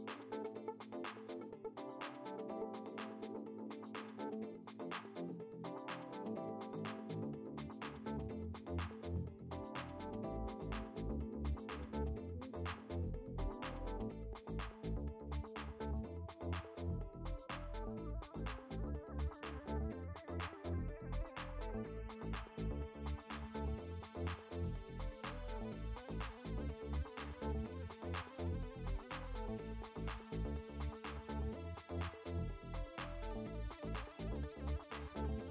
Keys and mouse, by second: 1.2 click, 6.2 click, 20.5 click, 24.1 space, 24.3 click, 27.0 ctrl+z, 28.1 space, 28.3 click, 30.5 click, 33.6 click, 35.0 click.